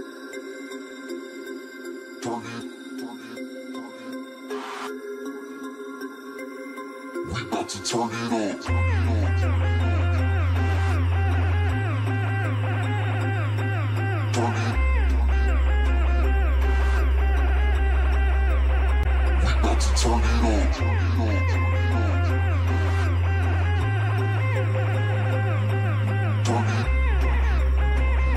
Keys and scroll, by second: 4.2 ctrl+space, 5.0 ctrl+space, 14.7 ctrl+space, 19.6 ctrl+x, 20.3 ctrl+f, 23.7 ctrl+space, 24.7 ctrl+shift+space.